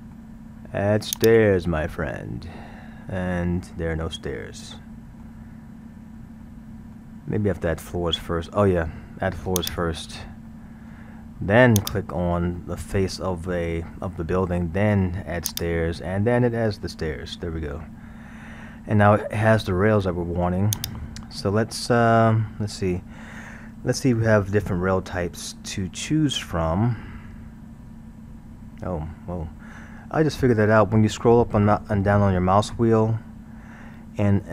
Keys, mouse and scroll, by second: 1.2 click, 2.1-5.7 middle drag, 5.7-6.3 scroll, 6.4-9.4 middle drag, 9.6 click, 10.5-11.8 middle drag, 11.8 click, 12.6-15.5 middle drag, 15.5 click, 16.4-16.9 scroll, 16.9-19.9 middle drag, 20.8 click, 27.7-28.7 scroll.